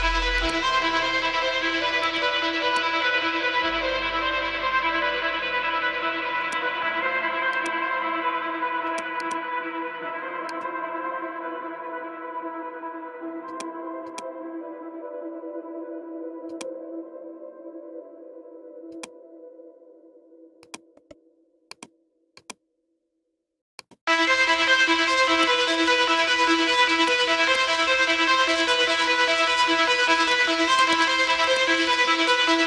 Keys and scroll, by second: 11.0 Return, 12.1 ctrl+[, 15.3 ctrl+-, 25.9 Return, 29.1 ctrl+j.